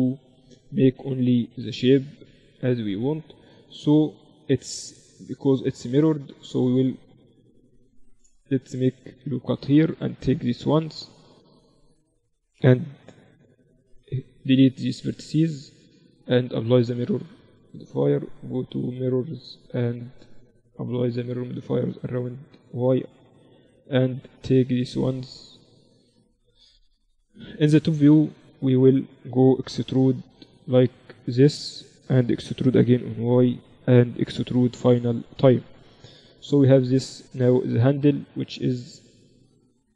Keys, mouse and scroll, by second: 0.7-3.8 drag, 3.0 right click, 4.0 Tab, 4.8 a, 5.5 ctrl+r, 6.7 middle click, 8.9 ctrl+r, 9.9-11.9 right drag, 11.7 click, 12.1-13.5 drag, 12.9 z, 13.9 z, 14.1 x, 17.7-21.2 drag, 22.1-24.1 drag, 23.7-25.9 right drag, 24.7-26.5 drag, 26.5 KP_7, 29.9 e, 32.8 e, 34.7 e, 36.9 Tab.